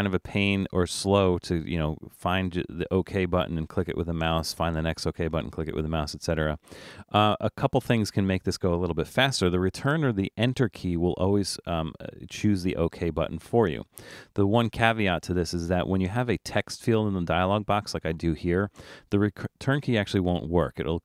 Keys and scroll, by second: 18.8 Return.